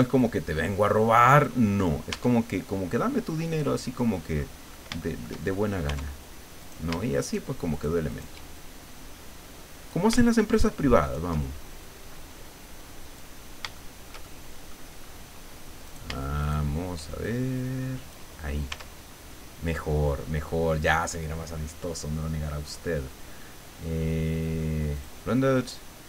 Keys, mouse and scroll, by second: 0.2-1.6 drag, 1.7 scroll down 2, 2.1 Tab, 2.6-2.9 scroll down 2, 3.4-4.6 middle drag, 4.7-5.0 scroll up 2, 5.0 shift+middle click, 5.9 Tab, 6.6 shift+right click, 7.2 shift+right click, 7.7 shift+right click, 8.1 shift+right click, 8.6-10.1 shift+drag, 10.5 shift+right click, 11.0 shift+right click, 11.9-13.4 drag, 13.5 scroll down 1, 13.8-14.9 shift+middle drag, 15.0 scroll up 2, 15.9 shift+right click, 16.4 shift+right click, 17.2 shift+click, 18.4 scroll down 2, 18.7 Tab, 19.0-19.3 scroll down 1, 19.7-20.0 scroll down 1, 20.2 middle click, 22.7 click, 25.0 click.